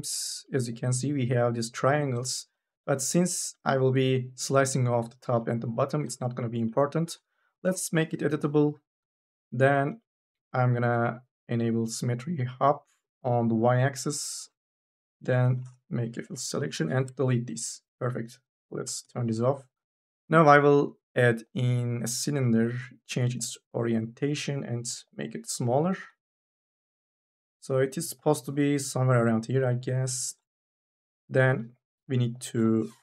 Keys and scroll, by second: 7.5 c, 8.5 2, 14.5 2, 15.8 u, 16.2 f, 16.4 Delete, 18.7 4, 18.9 e, 24.7 t, 25.8 e.